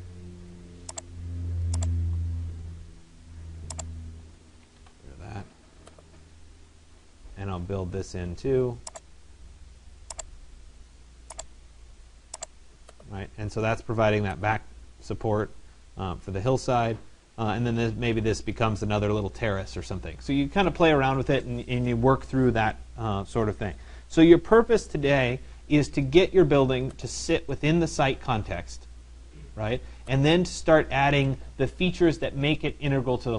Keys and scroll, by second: 4.4 Delete.